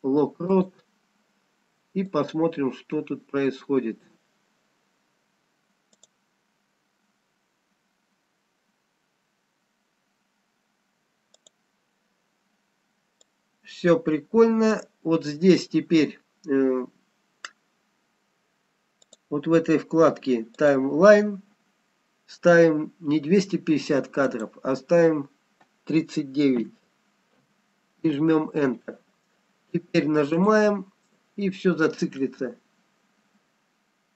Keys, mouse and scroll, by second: 2.3 click, 6.4 click, 11.8 click, 13.4 click, 20.6 click, 24.3 click, 30.4 click, 32.7 middle click.